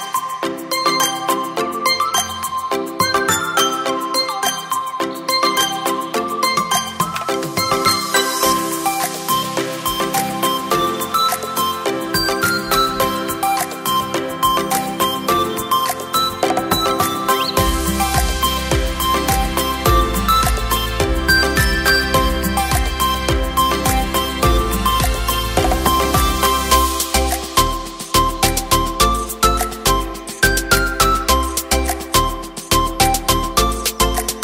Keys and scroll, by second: 2.7 Return, 3.8 space, 7.0 e, 7.9 ], 8.3 ], 11.2 v, 19.8 Return, 26.3 Return.